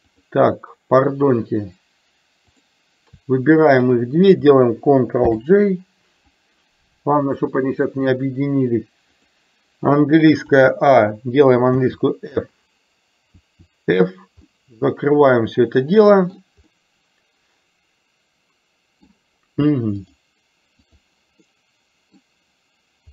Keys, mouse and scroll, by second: 0.2-2.8 drag, 5.3 ctrl+j, 7.4-9.4 drag, 10.5 a, 11.9 f, 13.5 f, 14.5-16.4 middle drag, 16.8-19.2 middle drag, 20.2 click, 21.5-22.2 middle drag.